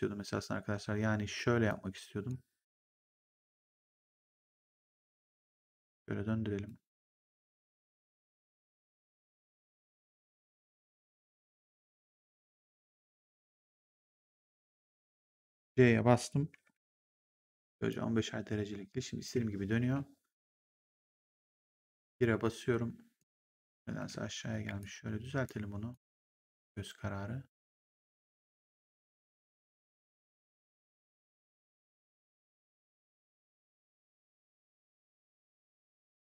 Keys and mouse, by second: 0.1 w, 1.5 click, 4.6 click, 5.1 e, 5.8 click, 7.1 w, 7.7 click, 10.4 w, 10.9 click, 14.7 e, 17.8 click, 19.7 w, 20.4 click, 21.2 ctrl+1, 23.1 right click, 23.4 click, 23.9 w, 24.7 click, 25.8 click, 28.9 click, 30.7 click.